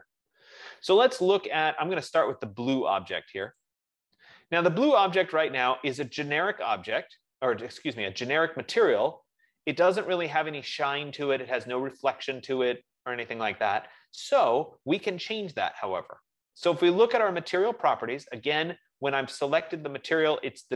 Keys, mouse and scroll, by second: 3.9-8.8 drag.